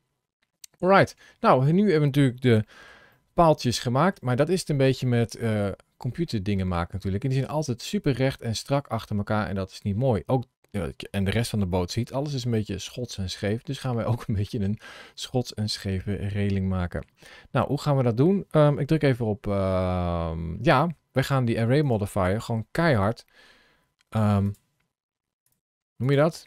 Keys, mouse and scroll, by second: 1.4 scroll up 1, 2.5 shift+middle click, 3.0 middle click, 4.9 middle click, 11.6-14.3 middle drag, 21.7 click, 24.5 click, 25.4 click, 25.9 click.